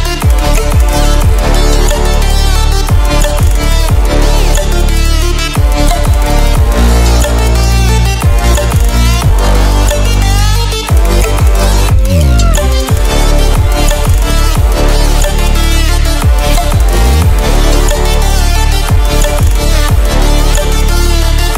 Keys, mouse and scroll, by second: 7.1 ctrl+w, 9.0 click, 13.6 ctrl+w, 15.5 ctrl+w, 16.9-18.9 drag, 21.4 ctrl+alt+scroll up 1.